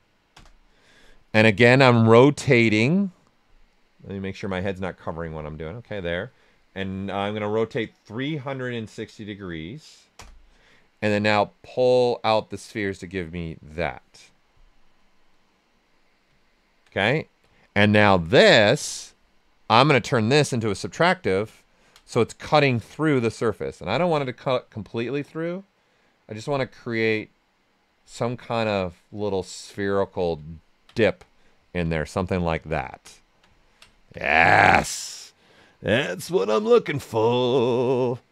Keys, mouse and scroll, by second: 0.4 Return, 2.1 click, 5.6 click, 8.3-9.8 typing, 10.1 Return, 11.3-14.4 drag, 14.4-16.4 right drag, 16.4 alt+right click, 16.9-18.6 ctrl+alt+right drag, 18.6 click, 18.6 typing, 21.0 right click, 22.5-24.0 ctrl+right drag, 24.0-26.8 drag, 26.8-28.4 drag, 28.4-30.0 drag, 30.0 typing, 30.5 ctrl+right click, 31.2 right click, 31.8 alt+right click, 32.8 ctrl+right click, 33.5 ctrl+alt+right click.